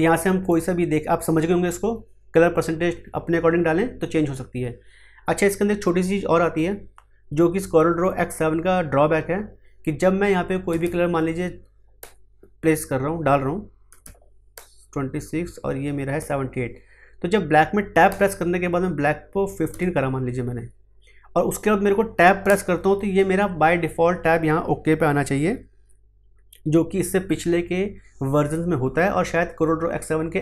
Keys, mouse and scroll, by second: 12.0 Tab, 14.5 Tab, 19.9 Tab, 22.4 Tab.